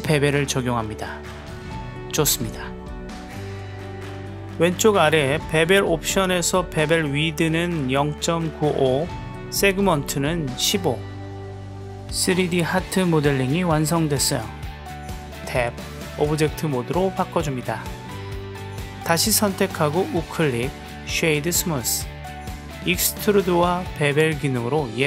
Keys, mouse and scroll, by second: 0.1-1.7 drag, 8.6 click, 13.3 w, 13.8 click, 15.6 Tab, 16.2 click, 16.7-17.7 middle drag, 18.2 click, 18.7 right click, 19.3 click, 23.0-23.6 middle drag, 23.6-25.0 drag.